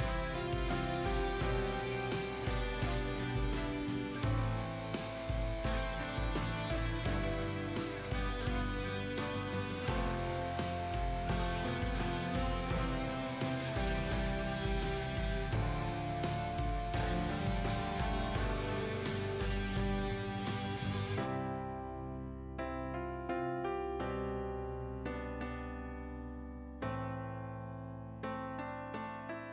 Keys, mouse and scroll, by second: 0.4 scroll up 1, 0.9 click, 2.5-3.1 scroll up 1, 3.1-6.8 drag, 7.7 KP_1, 9.5 click, 25.1 scroll down 1, 25.4 click, 26.9 scroll down 1, 28.1 click, 28.9 scroll up 1, 29.3 click.